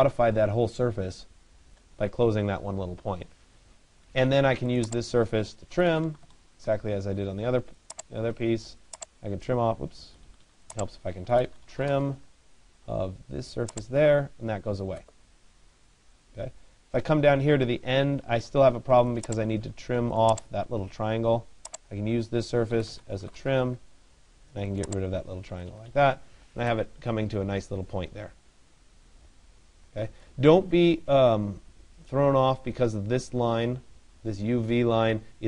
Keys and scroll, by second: 3.7 Escape, 18.0 Escape, 22.9 Return.